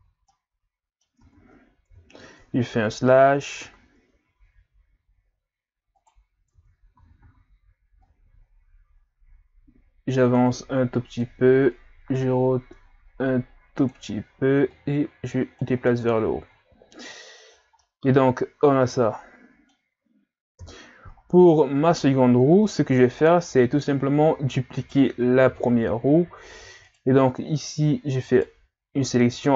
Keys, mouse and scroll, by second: 0.3 middle click, 1.2 Tab, 1.9 KP_3, 3.1-4.0 scroll down 4, 4.0-5.0 scroll down 1, 5.0-5.6 scroll up 4, 6.0 right click, 6.5 Tab, 7.0 a, 7.2 a, 8.0 click, 12.1 r, 14.7 click, 15.9 Tab, 16.3 a, 16.5-17.4 scroll down 3, 17.4-17.8 scroll down 5, 17.8-20.6 middle drag, 20.6 KP_3, 22.1-22.7 scroll up 2, 22.7 scroll up 3, 22.8-23.7 scroll down 6, 23.7-24.8 scroll up 4, 24.8 right click, 25.3-25.7 scroll down 3, 25.7-26.7 scroll up 4, 26.8 right click, 27.3 scroll down 2, 27.7-28.1 scroll up 1, 28.3 shift+right click, 28.7-29.5 scroll down 2.